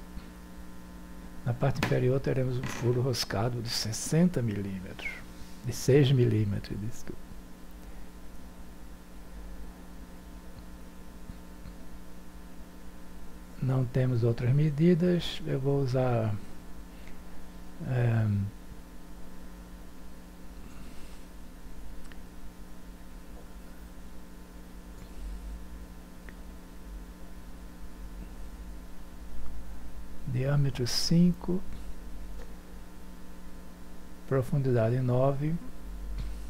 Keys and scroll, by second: 23.5 6, 28.7 9, 34.1 5, 34.4 Return.